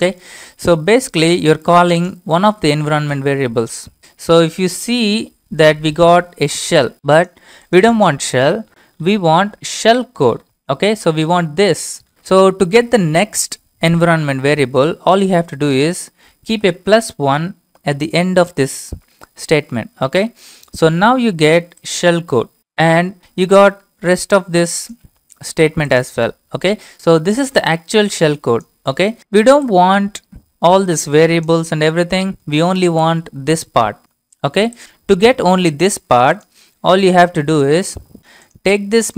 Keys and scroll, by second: 3.2 Return, 4.0 Up, 4.6 Left, 16.5-16.9 typing, 20.1 Return.